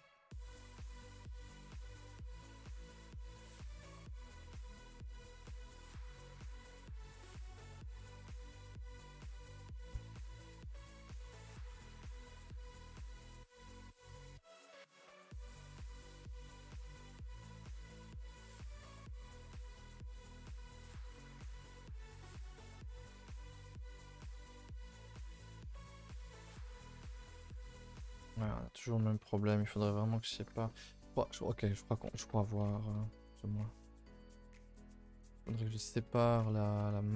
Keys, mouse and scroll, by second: 3.1 scroll up 1, 3.4-4.5 middle drag, 4.5 alt+click, 4.7-6.2 middle drag, 6.2 alt+shift+click, 6.5 middle click, 6.8-7.1 scroll up 2, 7.1 scroll down 2, 7.2 a, 7.3 a, 7.5 3, 8.0 alt+click, 8.7 h, 8.9 middle click, 9.8 2, 10.1 alt+Left, 10.3 middle click, 10.6-11.0 scroll up 2, 11.0 alt+shift+Left, 11.3 middle click, 12.3 alt+shift+Left, 13.0 scroll up 1, 13.3-14.4 middle drag, 14.4 alt+shift+Left, 15.0 ctrl+z, 15.5 alt+shift+Left, 15.8-16.8 middle drag, 16.8 alt+shift+Left, 17.5 right drag, 17.8-18.6 scroll down 2, 18.6 alt+h, 19.1-20.6 middle drag, 20.6 scroll down 1, 20.7-22.5 typing, 26.2 u, 27.6 a, 27.7 a, 30.7 ctrl+z, 30.9 ctrl+z, 32.6 ctrl+z, 32.9 ctrl+z, 33.5 ctrl+z, 34.0 a, 34.1 a, 34.3 middle click, 34.4 2, 34.7 scroll up 2, 35.1 shift+middle click, 35.3 scroll up 1, 35.4 middle click, 35.9 a, 36.0 a, 36.5 middle click, 36.8 1, 37.1 click.